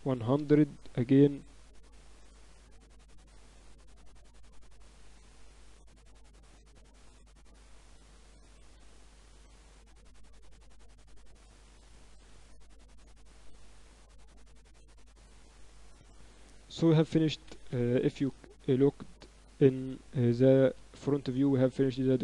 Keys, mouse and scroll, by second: 1.3-3.3 drag, 3.5-6.6 middle drag, 6.6 ctrl+s, 7.7-9.5 drag, 10.4 alt+h, 12.0 shift+d, 16.3 z, 18.1 KP_1, 19.6 z, 20.7 ctrl+s.